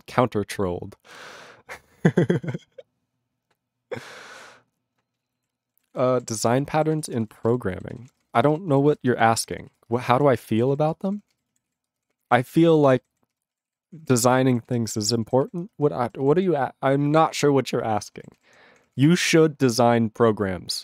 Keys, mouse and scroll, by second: 5.3 ctrl+e, 5.9 ctrl+s, 6.1 ctrl+a, 6.5 ctrl+e, 6.9 ctrl+s, 7.0 ctrl+p, 7.1 ctrl+space, 7.2 ctrl+e, 7.2 ctrl+n, 7.3 ctrl+n, 7.4 ctrl+g, 7.9 ctrl+s, 8.0 ctrl+p, 8.2 ctrl+space, 8.3 ctrl+n, 8.4 ctrl+n, 8.5 ctrl+g, 8.8 ctrl+s, 8.9 ctrl+space, 9.0 ctrl+n, 9.1 ctrl+n, 9.2 ctrl+n, 9.4 ctrl+g, 9.7 ctrl+s, 9.8 ctrl+space, 9.8 ctrl+n, 10.0 ctrl+n, 10.3 ctrl+g, 10.7 ctrl+s, 10.8 ctrl+p, 11.0 ctrl+space, 11.0 ctrl+p, 11.2 ctrl+p, 11.3 ctrl+g, 11.6 ctrl+s, 11.8 ctrl+space, 11.9 ctrl+p, 12.1 ctrl+p, 12.2 ctrl+g, 12.5 ctrl+s, 12.6 ctrl+p, 12.7 ctrl+space, 12.8 ctrl+n, 12.9 ctrl+n, 13.1 ctrl+n, 13.3 ctrl+g, 13.7 ctrl+s, 13.7 ctrl+space, 13.8 ctrl+p, 14.0 ctrl+p, 14.1 ctrl+p, 14.3 ctrl+g, 14.7 ctrl+s, 14.7 ctrl+space, 14.8 ctrl+p, 14.9 ctrl+p, 15.0 ctrl+g, 15.4 ctrl+s, 15.6 ctrl+space, 15.8 ctrl+n, 16.0 ctrl+g, 16.3 ctrl+s, 18.1 ctrl+space, 18.3 ctrl+s, 18.4 ctrl+n, 18.6 ctrl+p, 18.8 ctrl+p, 18.9 ctrl+g, 19.3 ctrl+s.